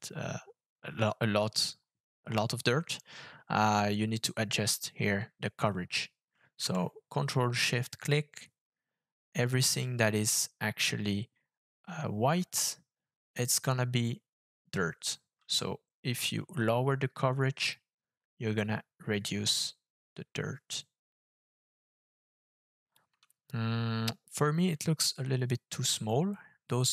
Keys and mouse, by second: 7.9 ctrl+shift+click, 16.3-22.9 shift+drag.